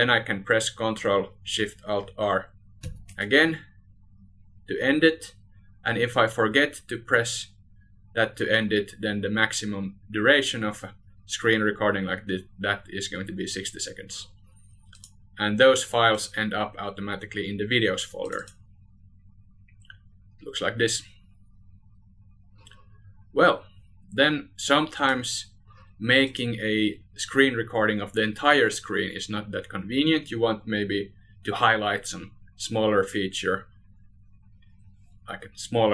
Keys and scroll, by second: 18.1 ctrl+alt+shift+r.